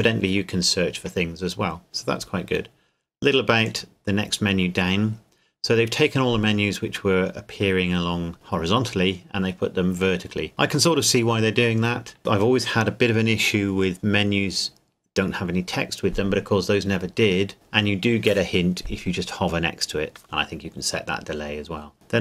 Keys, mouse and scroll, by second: 3.6 click.